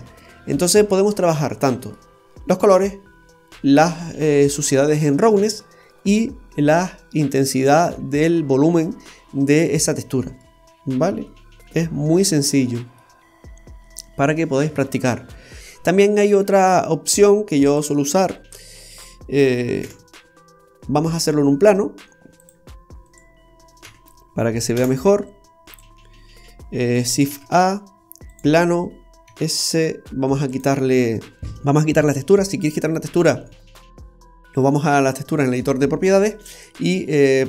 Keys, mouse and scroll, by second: 0.9-2.2 scroll down 9, 1.7 middle click, 9.2-9.7 scroll up 1, 9.7 middle click, 9.7-10.4 scroll up 1, 10.9 scroll down 2, 11.3 middle click, 13.0-13.3 scroll up 1, 13.3-13.8 scroll down 1, 13.8 middle click, 13.8-14.2 scroll down 1, 15.1-15.8 scroll down 2, 15.6 middle click, 17.6 click, 18.9 click, 19.9 Delete, 21.1-21.4 scroll down 1, 22.5 click, 23.0 right click, 23.8 a, 24.7 Delete, 27.0 click, 27.3 shift+a, 36.5 click.